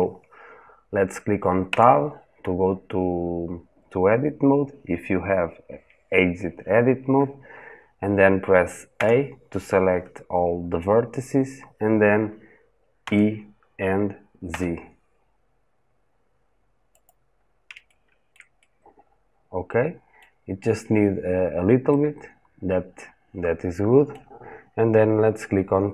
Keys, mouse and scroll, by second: 1.4 Tab, 8.7 a, 12.8 e, 17.1-17.5 scroll up 1, 17.7-25.8 shift+middle drag, 25.8 Tab.